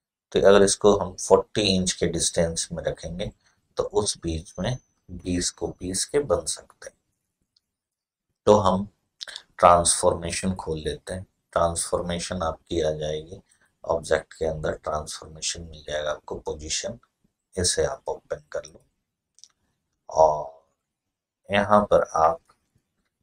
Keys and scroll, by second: 22.7-23.2 typing.